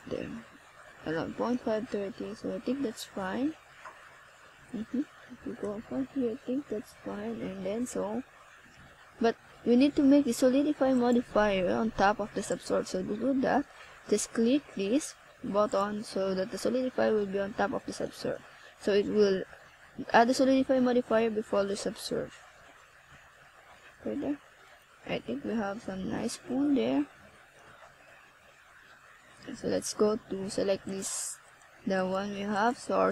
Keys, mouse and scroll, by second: 0.1 click, 2.9 click, 7.8 click, 8.5 click, 10.3 click, 11.6 click, 21.8 click, 28.1 middle click, 29.6 scroll up 1, 29.8 middle click, 31.1 right click, 31.7 shift+right click, 32.5 ctrl+z.